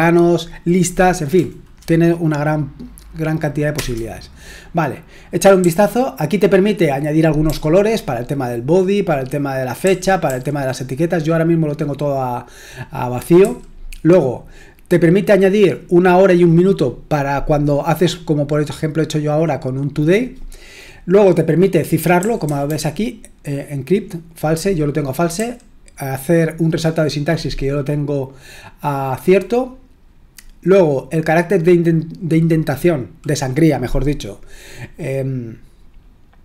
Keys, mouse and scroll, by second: 3.7 Return, 5.6 j, 7.5 j, 9.8-10.3 typing, 13.4 typing, 22.2-22.7 typing, 25.4 typing.